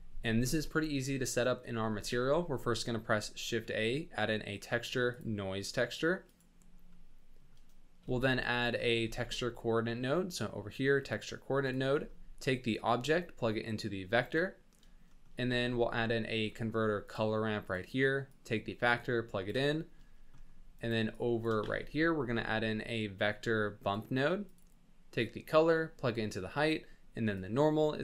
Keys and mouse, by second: 0.9 middle click, 2.0 shift+a, 8.6 click, 9.0 shift+a, 12.7-14.2 drag, 15.5 shift+a, 18.3-19.6 drag, 19.7 click, 20.4 click, 21.2 click, 21.7 shift+a, 25.2 click, 25.4-26.7 drag, 27.4-28.0 drag.